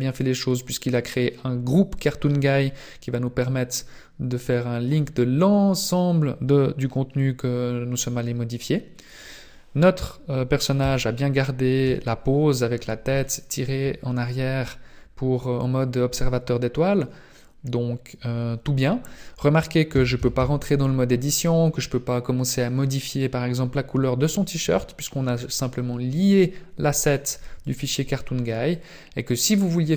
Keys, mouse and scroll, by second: 4.9 click, 6.4 scroll up 4, 10.8 KP_3, 11.8 KP_5, 12.5-13.2 scroll up 2, 13.2 shift+middle click, 14.4 scroll up 1, 14.6-15.0 scroll down 1, 15.4-15.8 scroll up 1, 19.9 Tab, 20.2 Tab, 20.4 Tab.